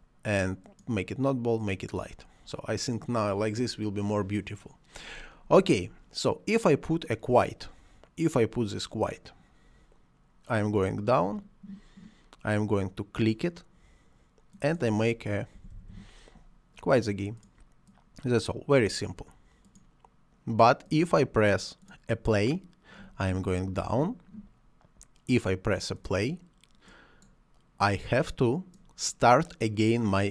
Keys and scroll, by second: 15.5 q, 15.7 u, 15.9 i.